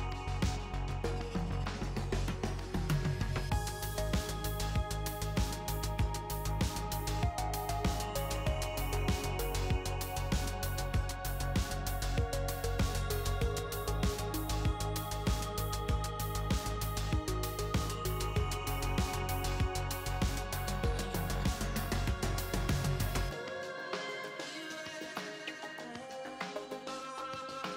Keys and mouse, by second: 1.7-2.9 middle drag, 4.4 click, 4.9 middle click, 6.5 e, 7.9-9.0 drag, 9.0 ctrl+r, 13.6 ctrl+z, 13.7 ctrl+z, 14.6 ctrl+r, 18.1-21.1 drag, 23.3 e, 25.6 ctrl+r, 27.6 ctrl+r.